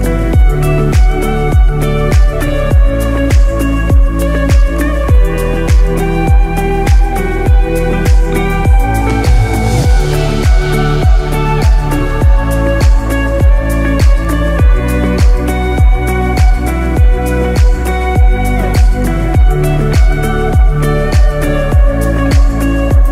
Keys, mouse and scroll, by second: 0.5 shift+middle click, 0.9 shift+scroll up 1, 1.0 middle click, 1.4 scroll up 2, 1.7 shift+middle click, 2.7 g, 9.1-9.6 scroll down 1, 9.7 scroll down 2, 10.0 middle click, 10.4 scroll down 1, 11.2 shift+middle click, 11.2 scroll down 3, 11.7-12.1 scroll up 4, 12.0 middle click, 12.3 scroll down 1, 12.4-12.8 scroll up 2, 12.8 shift+middle click, 14.1 ctrl+r, 17.5 middle click, 17.8-19.0 scroll down 2, 19.0 ctrl+r, 22.3 scroll down 4, 22.8 middle click.